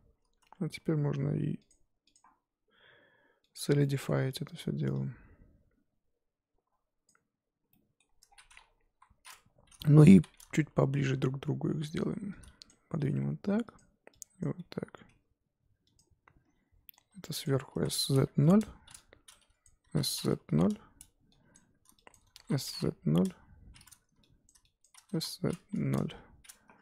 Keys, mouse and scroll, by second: 0.4 Tab, 3.5 click, 3.8-5.2 middle drag, 5.2-7.7 drag, 7.7 middle click, 8.2-8.6 scroll down 5, 8.6-8.9 scroll up 4, 8.9 KP_1, 10.1 ctrl+KP_1, 10.7 Tab, 11.0 a, 11.7 1, 12.1 z, 12.7 click, 13.0 g, 14.4 click, 14.6 g, 16.5-16.9 scroll up 1, 17.4 click, 17.7 s, 19.6 click, 19.8 s, 21.5 click, 22.1 shift+click, 22.3 s, 24.4 click, 24.8 shift+click, 25.1 s, 26.7 z.